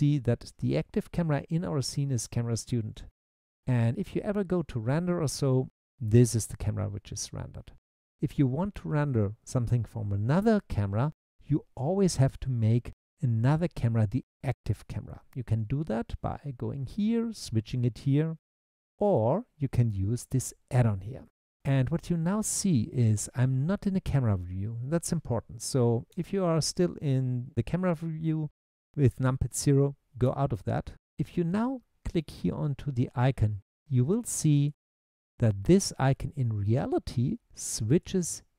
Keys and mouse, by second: 17.1-19.1 drag, 26.1 KP_0, 30.3 KP_0, 33.1 click, 34.5 click, 36.1 click, 38.0 click.